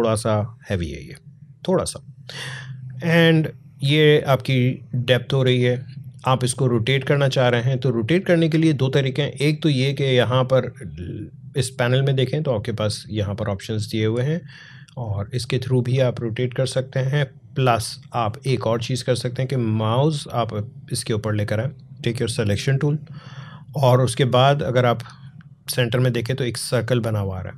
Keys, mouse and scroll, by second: 3.2 click, 12.2-22.2 drag.